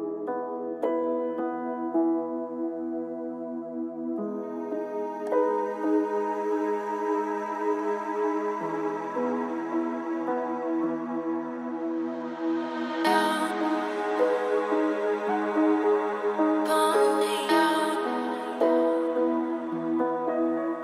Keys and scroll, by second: 14.5 ctrl+space.